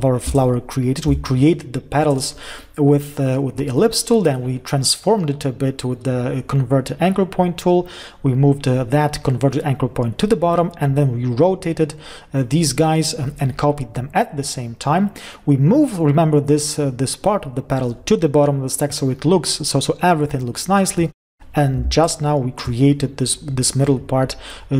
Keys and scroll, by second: 22.4 ctrl+shift+space.